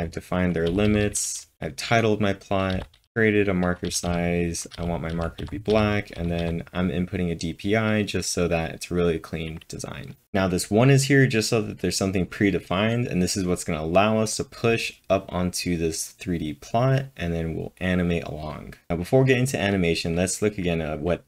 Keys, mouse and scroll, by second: 1.0-1.8 typing, 6.0-6.7 typing, 8.2-8.9 typing, 18.6-19.4 typing.